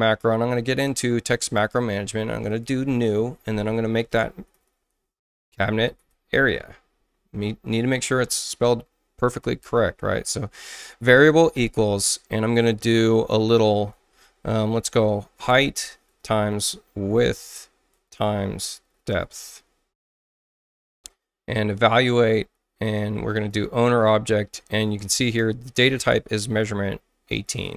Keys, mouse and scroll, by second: 2.5 click, 3.8-7.0 typing, 7.6 click, 9.2-10.1 typing, 11.6 =, 14.5-19.9 typing, 21.9 click, 22.8 click, 23.3 click, 25.7 click, 27.4 click.